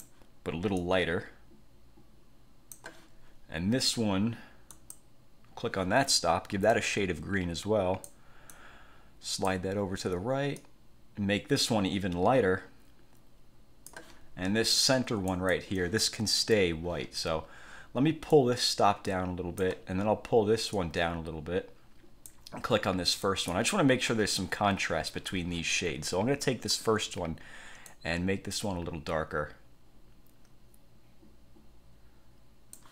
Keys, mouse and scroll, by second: 0.9-3.0 drag, 4.8 click, 6.8 click, 8.6-9.8 drag, 10.7-14.2 drag, 15.4 click, 18.4-19.9 drag, 20.9-22.6 drag, 23.4 click, 28.0-32.9 drag.